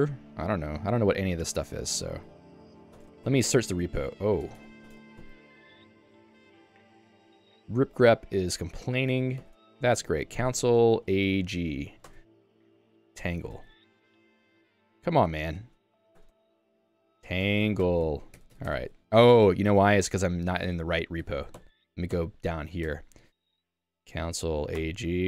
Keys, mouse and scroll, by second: 0.0-1.0 typing, 1.8 ctrl+d, 1.9 ctrl+d, 2.1 ctrl+d, 2.3 ctrl+d, 3.5 ctrl+f, 4.5 Escape, 4.6 Escape, 5.6 ctrl+f, 9.4 ctrl+g, 18.5 Escape, 18.7 Escape, 21.3 super+e, 21.6 h, 22.2 h, 22.8 Escape.